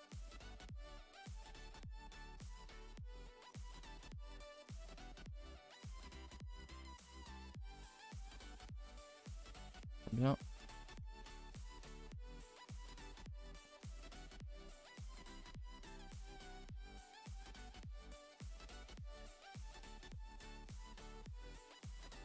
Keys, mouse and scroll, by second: 2.3 g, 3.2 r, 4.3 Tab, 4.7 scroll down 2, 4.9-5.3 middle drag, 5.3-5.9 scroll up 6, 5.9 Tab, 6.0-7.9 middle drag, 7.9 alt+h, 8.2 a, 8.3 a, 8.4 middle click, 8.6 ctrl+s, 8.9 Tab, 9.0 middle drag, 9.2 a, 9.3 a, 9.8 shift+middle click, 10.7-11.2 scroll up 3, 11.2 middle click, 11.9 Tab, 12.2 shift+middle click, 12.5 Tab, 12.7 click, 12.7 Tab, 12.9 middle click, 13.0 a, 13.2 a, 13.5 click, 13.9 shift+click, 14.1 middle click, 14.5 g, 17.2 click, 17.5 g, 19.1-20.9 middle drag, 20.9 g, 21.6 click, 21.6 g.